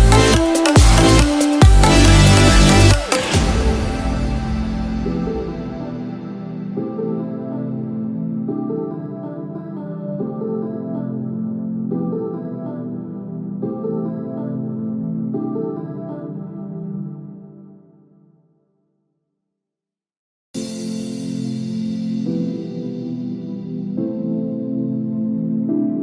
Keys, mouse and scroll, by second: 0.6 shift+click, 1.8 ctrl+click, 2.6-2.9 scroll down 1, 2.9 scroll up 1.